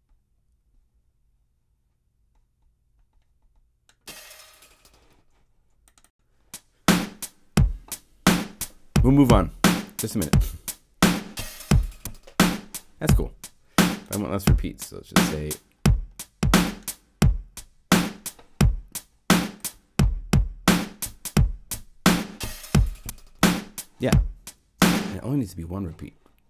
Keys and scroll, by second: 24.8 0.